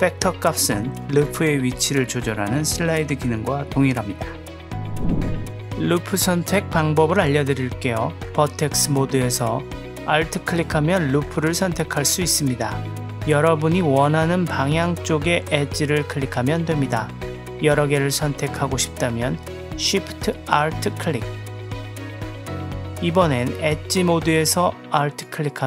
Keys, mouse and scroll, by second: 8.9 click, 12.2 alt+click, 15.4 alt+click, 17.8 alt+shift+click, 18.3 alt+shift+click, 18.7 alt+shift+click, 19.1 alt+shift+drag, 20.9-22.2 alt+shift+drag, 22.6-23.7 drag, 23.8 click, 25.5 alt+click.